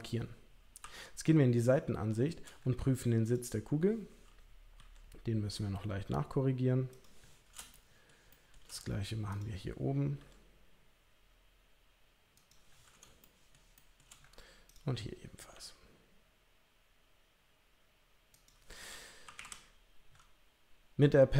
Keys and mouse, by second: 0.8 KP_3, 3.2 click, 4.7 g, 7.7 shift+middle click, 8.3 shift+middle click, 9.3 click, 10.1 g, 13.2 shift+middle click, 13.7 shift+middle click, 14.7 click, 15.5 g, 19.2 KP_3, 19.3 KP_1.